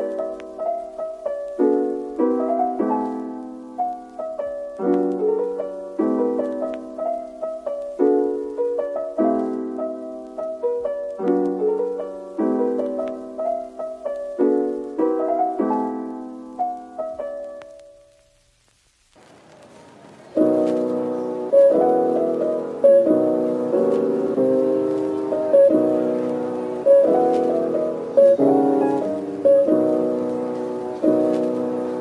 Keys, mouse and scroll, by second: 0.7 Tab, 1.3 scroll down 1, 1.8 scroll up 1, 2.5 Tab, 6.9 ctrl+l, 8.9 double click, 10.0-12.6 scroll down 1, 12.6 double click, 14.5 Tab, 15.9 middle click, 17.9 scroll up 1, 18.6 shift+click, 18.9 shift+double click, 21.4 ctrl+l, 23.2 scroll up 1, 25.2 Tab, 25.2-28.7 scroll up 1.